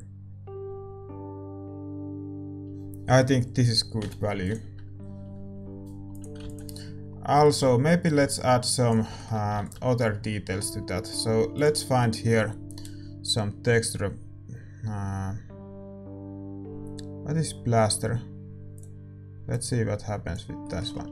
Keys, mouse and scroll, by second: 4.4 ctrl+s, 4.4-18.7 middle drag.